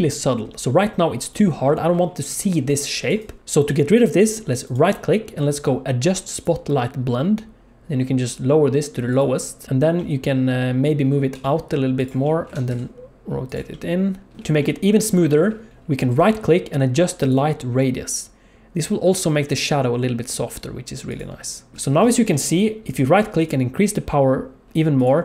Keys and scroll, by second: 2.1-3.4 d, 11.3 g, 12.4 r, 14.4 alt+shift+z, 21.7 alt+shift+z.